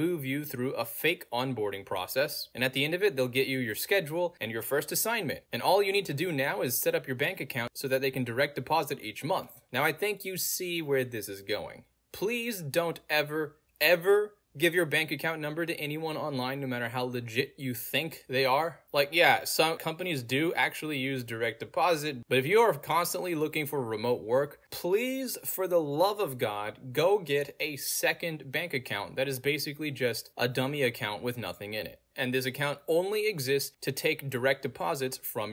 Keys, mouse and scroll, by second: 0.5 click, 0.6 click, 1.8 Return, 4.4 click, 5.7 middle click, 5.7-6.3 scroll down 2, 6.9 middle click, 6.9 scroll down 2, 7.3 click, 8.9 click, 10.2 middle click, 10.2 scroll down 2, 11.1 click, 19.5 middle click, 19.5-20.0 scroll down 2, 22.0 click, 23.7 middle click, 23.7-24.2 scroll down 2, 24.8 middle click, 24.8 scroll down 2, 27.7 click, 28.6 click, 30.3 click, 31.5 middle click, 31.5 scroll down 2, 33.1 click, 34.2 middle click, 34.2-34.8 scroll down 4, 34.2 middle click, 34.8-35.5 scroll down 1.